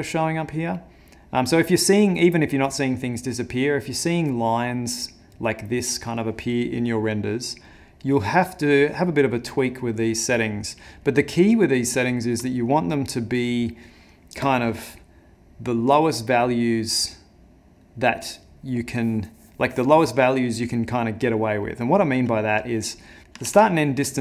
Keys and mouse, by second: 7.7 click, 9.1 click, 11.1 click, 12.7 click.